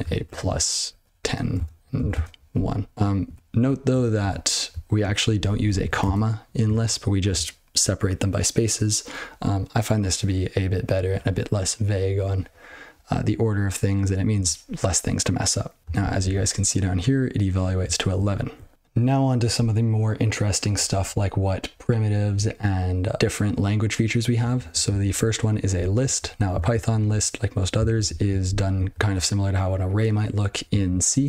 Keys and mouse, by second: 0.8 ctrl+f, 0.9-2.5 typing, 2.9 ctrl+/, 3.2 ctrl+/, 3.5 ctrl+/, 3.9 ctrl+/, 4.1 ctrl+/, 4.6 ctrl+n, 5.2 ctrl+f, 5.4 ctrl+f, 5.6 ctrl+f, 5.8 ,, 6.0 space, 6.7 ctrl+/, 15.9 ctrl+n, 16.1 ctrl+n, 17.8-18.1 ctrl+n, 18.3 ctrl+p, 18.4 ctrl+p, 24.8 ctrl+n, 25.0 ctrl+n, 25.7-26.1 ctrl+f, 26.5 ctrl+alt+space, 26.8 ctrl+g, 27.1 ctrl+e, 27.8 ctrl+alt+b, 28.4 ctrl+b, 28.6 ctrl+b, 30.8 ctrl+f.